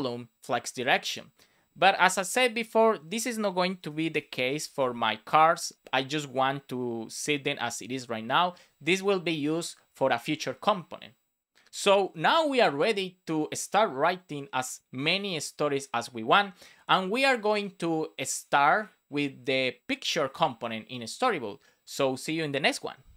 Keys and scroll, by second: 3.6 BackSpace, 4.5 super+s.